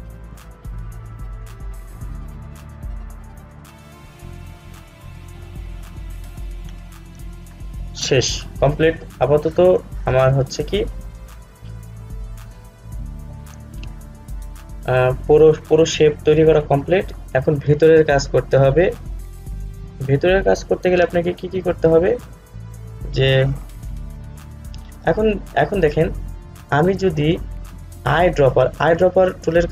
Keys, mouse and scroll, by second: 8.8 scroll up 1, 28.6 click.